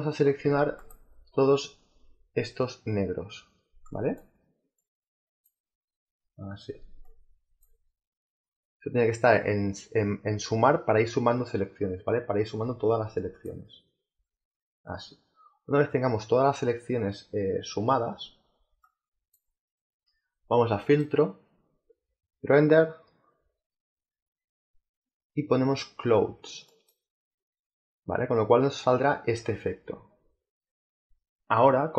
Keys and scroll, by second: 30.9 space.